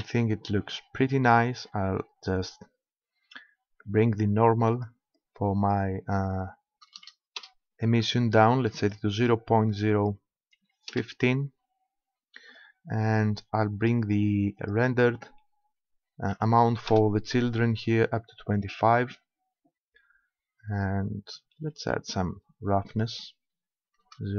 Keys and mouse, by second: 0.9-2.7 middle drag, 3.3-4.8 middle drag, 4.8-6.5 drag, 8.8-10.6 drag, 12.5-14.3 drag, 14.6-16.3 drag, 22.9-24.3 drag.